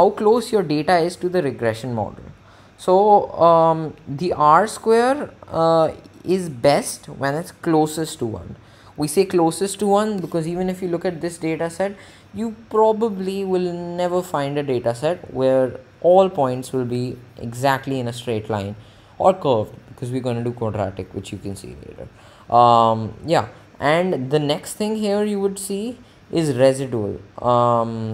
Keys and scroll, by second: 24.6 Down.